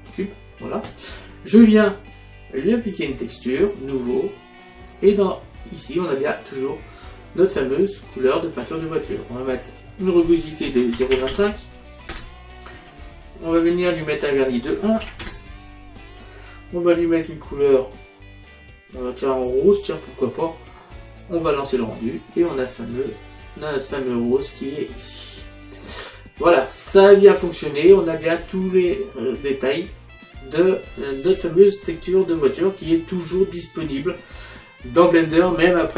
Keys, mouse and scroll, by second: 0.1 click, 2.9 click, 5.0 click, 6.4 click, 9.7 click, 10.8 KP_0, 11.0 KP_Decimal, 11.2 KP_2, 11.4 KP_5, 12.2 Return, 12.2 KP_Enter, 14.2 click, 15.1 KP_1, 15.3 Return, 15.3 KP_Enter, 17.0 click, 21.2 click, 22.9 middle click, 31.5 middle click.